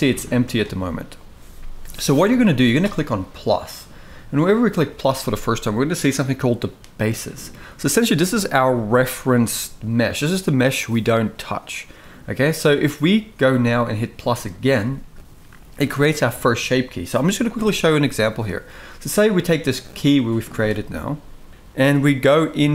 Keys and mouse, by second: 3.5 click, 14.3 click.